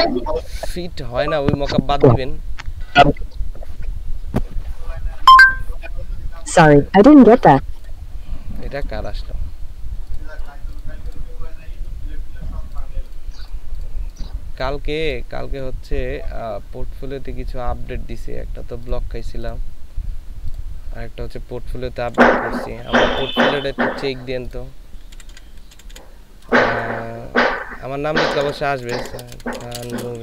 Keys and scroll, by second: 22.3 b, 23.2 BackSpace, 23.4 BackSpace, 23.5 BackSpace, 25.1-26.8 typing, 28.2-30.2 typing.